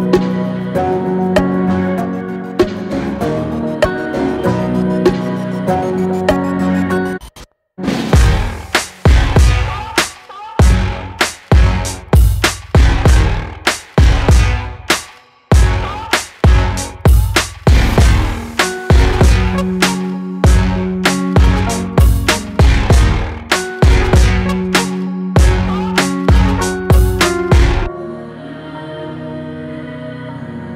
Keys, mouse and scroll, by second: 0.0 click, 0.8 alt+click, 1.7 alt+shift+click, 2.3-3.7 middle drag, 3.7 Tab, 4.3 g, 7.5 alt+middle click, 8.3 g, 12.9 alt+middle click, 13.5 scroll up 2, 14.2 s, 17.2 Tab, 17.9 ctrl+r, 24.7-25.9 drag, 25.9 s, 29.8-30.7 middle drag.